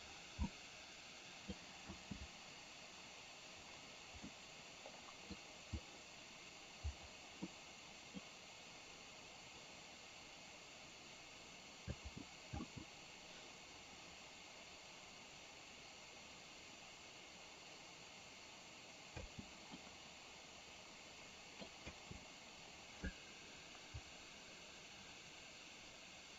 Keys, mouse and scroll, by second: 0.5-1.7 middle drag, 1.9 space, 4.3-5.4 middle drag, 7.7 middle click, 12.0 space, 12.5 space, 19.2 space, 19.9-21.8 middle drag, 22.0 space.